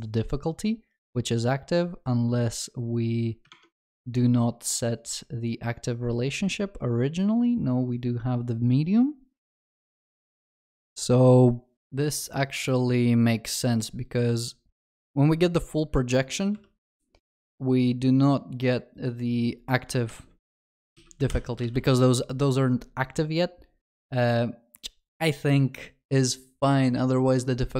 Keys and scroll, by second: 16.6 ctrl+b.